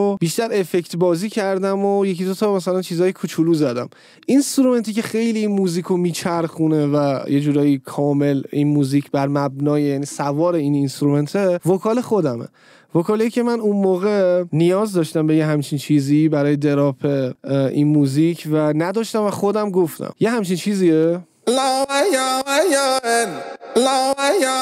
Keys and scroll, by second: 15.9 ctrl+l, 21.4 space.